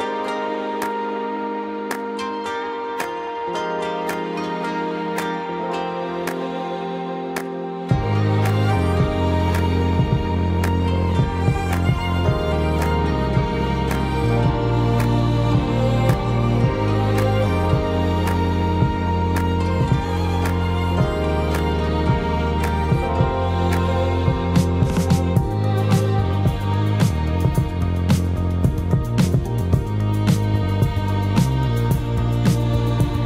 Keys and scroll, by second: 10.0 Delete.